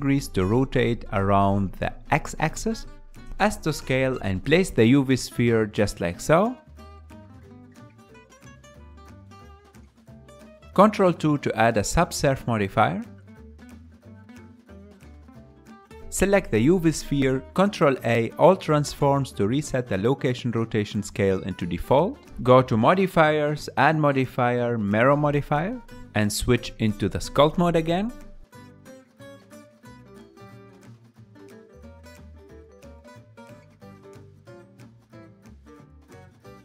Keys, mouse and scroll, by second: 0.5 g, 5.0 KP_Decimal, 5.9 s, 6.8 shift+middle click, 7.4 g, 9.5 KP_3, 10.3 drag, 10.5 KP_1, 11.8 ctrl+2, 12.3-14.0 ctrl+middle drag, 14.0 s, 15.9 click, 19.1 ctrl+a, 20.5-22.7 drag, 22.7 ctrl+z, 23.5-25.4 drag, 25.8-27.3 middle drag, 27.3 click, 27.8 ctrl+Tab, 29.2-30.5 middle drag, 30.5 f, 31.4-33.3 middle drag, 33.3-34.5 drag, 34.5 KP_Decimal, 35.4-36.6 ctrl+middle drag.